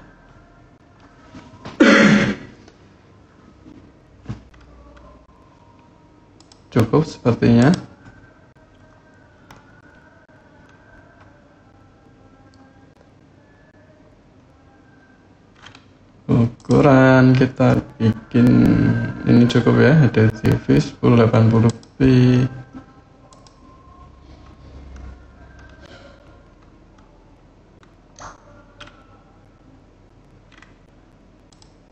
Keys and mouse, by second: 6.1 click, 7.4 click, 16.3-23.7 drag, 31.3 click.